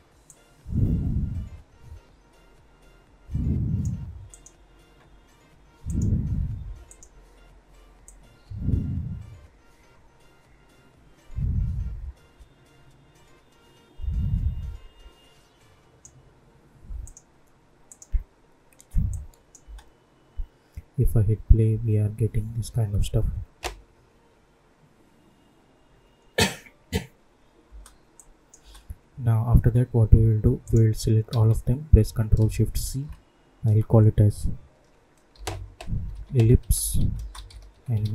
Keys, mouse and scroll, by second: 19.6 space, 27.6 space, 28.1 click, 28.5 space, 30.6 click, 31.2 ctrl+a, 32.8 ctrl+shift+c, 35.3-38.1 typing.